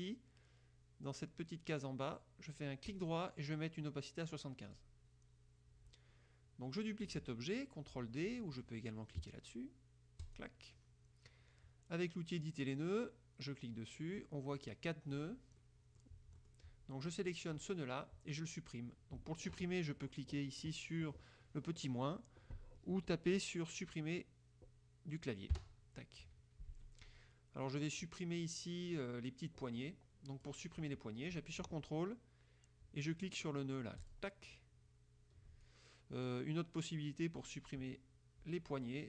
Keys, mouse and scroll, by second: 3.0 right click, 4.8 click, 10.4 click, 12.6 click, 14.7 click, 15.7 middle click, 16.5 middle click, 17.4 click, 25.6 Delete, 26.3 KP_Subtract, 29.1-30.8 drag, 34.2 ctrl+click, 35.8-37.8 ctrl+drag.